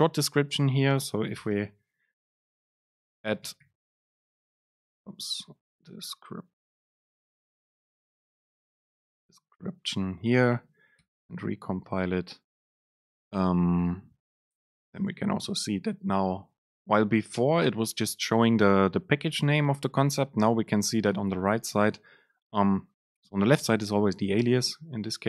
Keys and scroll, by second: 5.1 BackSpace, 11.1 ctrl+shift+super+F9, 15.0 super+space.